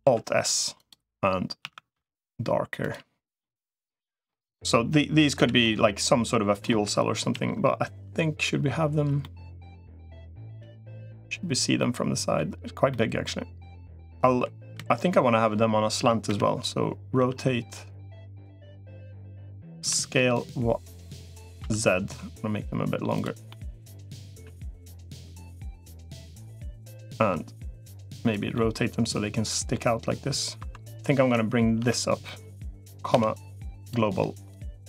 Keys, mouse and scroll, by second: 1.5 a, 1.7 g, 3.2 middle click, 5.1 l, 5.4-6.4 middle drag, 7.1 KP_1, 9.0 middle click, 10.5 KP_1, 11.6 middle click, 12.7 middle click, 14.5 KP_3, 16.1 KP_1, 17.1 r, 18.9-20.3 middle drag, 19.7 s, 23.3 middle click, 24.3 KP_1, 25.3 g, 26.9 r, 28.3-29.5 middle drag, 30.5 2, 30.7 click, 31.1 Tab, 31.7 Tab, 32.0 middle click, 32.9 ,, 34.3-34.8 drag.